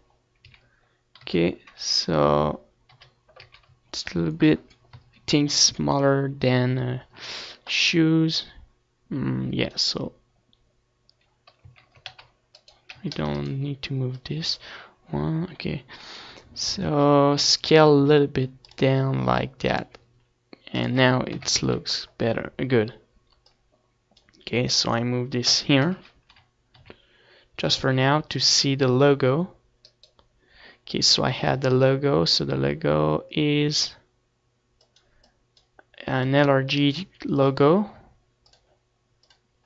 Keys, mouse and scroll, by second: 0.3 m, 2.1-3.6 drag, 2.8 z, 3.5 KP_3, 5.4 KP_1, 5.6 z, 10.3 middle click, 10.9-12.6 drag, 12.7-15.2 middle drag, 14.2 ctrl+z, 14.5 c, 15.2-16.7 right drag, 15.5 c, 20.4 s, 21.2-24.8 drag, 22.7 s, 23.9 KP_3, 24.2 z, 26.6-28.8 drag, 28.2 KP_0, 28.6 z, 29.0 click, 29.1 z, 29.9 ctrl+s, 32.4-37.1 right drag, 37.1 shift+a.